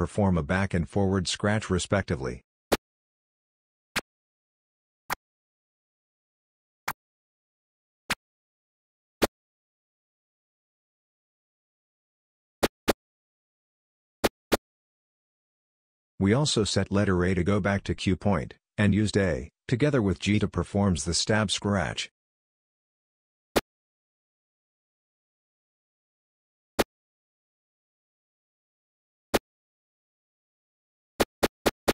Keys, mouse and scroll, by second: 2.7 g, 4.0 g, 5.1 g, 6.9 d, 8.1 d, 9.2 d, 12.4-14.5 typing, 23.5 g, 25.3 a, 26.8 g, 28.1 a, 29.3-31.9 typing.